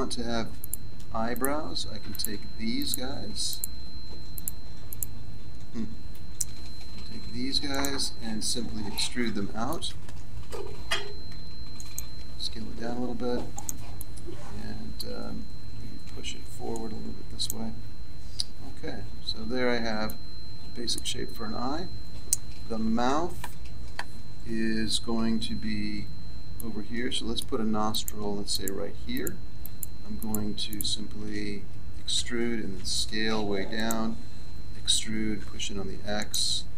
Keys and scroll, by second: 6.2 c, 8.6 Escape, 10.6 e, 18.6 Tab, 25.5 Tab, 32.1 e, 34.8 e.